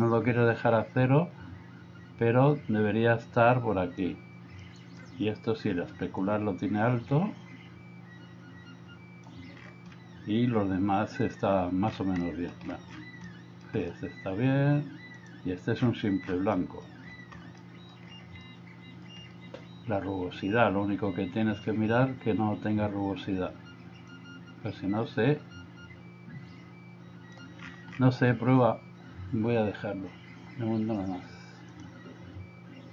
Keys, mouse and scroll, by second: 4.7 middle click, 6.2-9.4 drag, 12.4 middle click, 13.3 middle click, 16.7 middle click, 17.6 middle click, 18.5 middle click, 24.2-27.4 drag.